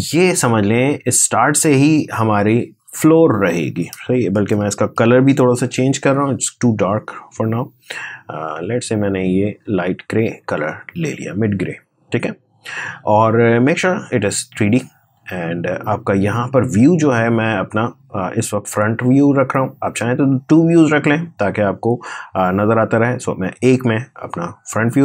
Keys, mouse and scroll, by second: 1.0 Return, 3.6 ctrl+Return, 5.2 ctrl+shift+y, 6.9-10.6 drag, 16.8-23.0 drag.